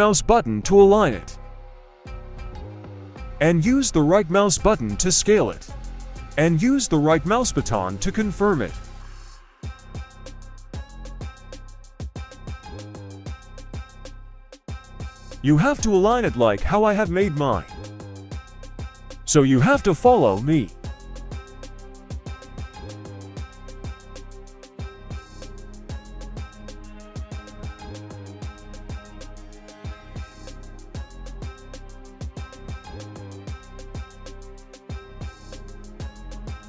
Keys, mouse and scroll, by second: 5.5-7.1 scroll up 1, 7.1-8.5 drag, 7.1-8.5 scroll up 1, 9.0 shift+middle click, 9.6 scroll up 1, 9.9 shift+middle click, 11.0 shift+middle click, 11.6 shift+middle click, 12.5 right click, 13.1 g, 14.9 right click, 15.1 g, 15.9 click, 15.9 right click, 16.0 g, 17.1 click, 17.1 right click, 17.3 g, 18.2-18.5 scroll down 1, 18.5 right click, 18.6 g, 19.0 right click, 19.1 g, 19.4 shift+middle click, 19.9 right click, 20.0 g, 20.6 click, 20.6 right click, 20.7 g, 22.7 click, 22.7 right click, 23.0-27.1 typing, 23.5 click, 23.5 right click, 24.0 click, 24.0 right click, 24.6 click, 24.6 right click, 25.4 click, 25.4 right click, 25.9 click, 25.9 right click, 26.3 click, 26.3 right click, 27.0 right click, 28.2 click, 28.2 right click, 28.4 g, 29.1 shift+middle click, 29.3 scroll up 1, 29.5 right click, 29.7-36.1 typing, 30.3 right click, 30.9 right click, 31.7 right click, 32.5 click, 32.5 right click, 33.0 click, 33.0 right click, 33.5 click, 33.5 right click, 34.0 click, 34.0 right click, 34.5 click, 34.5 right click, 35.0 click, 35.0 right click, 35.5 click, 35.5 right click, 35.9 click, 35.9 right click, 36.4 scroll down 1, 36.5 shift+middle click.